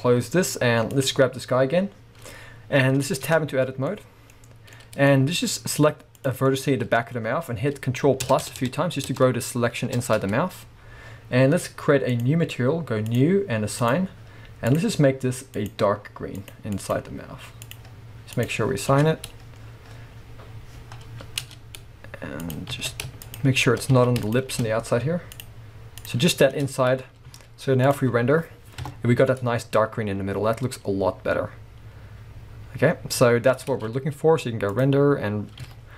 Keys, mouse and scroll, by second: 0.0-1.0 drag, 0.5-0.9 scroll up 1, 1.4-2.4 scroll up 1, 3.3 Tab, 3.8-6.2 middle drag, 4.3-4.7 scroll up 2, 5.1-6.2 scroll up 2, 6.2 click, 6.5-12.1 middle drag, 8.2 ctrl+KP_Add, 12.1-14.7 drag, 18.4-22.5 drag, 18.9 Tab, 19.2-20.1 scroll down 2, 20.1-20.9 scroll up 2, 20.9-21.4 scroll up 1, 21.4 Tab, 22.7 alt+a, 23.2 alt+shift+click, 23.9 alt+a, 24.2 alt+shift+click, 25.3 click, 26.0 click, 26.5 Tab, 26.8 scroll down 2, 27.3 z, 28.8 KP_0, 29.2 click, 29.6 scroll up 1, 30.0-30.3 scroll down 1, 33.8 alt+a, 34.8 click, 35.7 click, 35.7 z.